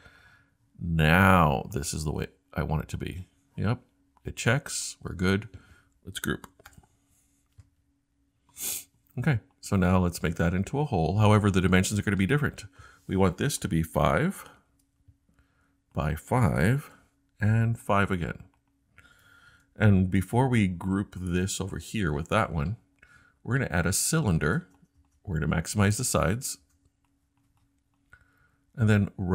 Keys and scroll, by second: 6.7 super+g, 14.4 5, 14.7 Return, 16.4 typing, 19.2-19.5 typing.